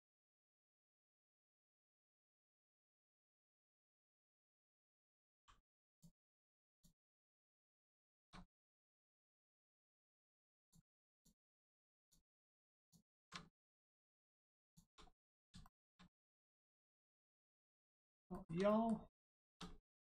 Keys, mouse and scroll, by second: 0.5 shift+middle click, 1.1 click, 1.7-2.2 scroll down 1, 2.3 shift+middle click, 4.3 click, 5.3 g, 5.9 click, 7.7 middle click, 8.0 shift+middle click, 8.3 scroll up 1, 8.9 shift+middle click, 9.2 scroll up 1, 9.7 middle click, 10.6 click, 11.1 alt+click, 11.9 alt+shift+click, 13.5 shift+middle click, 13.6 middle click, 14.6 shift+click, 15.1 middle click, 15.6 shift+middle click, 16.3 middle click, 16.4 middle click, 16.7 scroll down 1, 16.9 middle click, 17.3 shift+middle click, 17.9 scroll down 1, 18.3 shift+middle click, 18.7 middle click, 19.3 shift+middle click.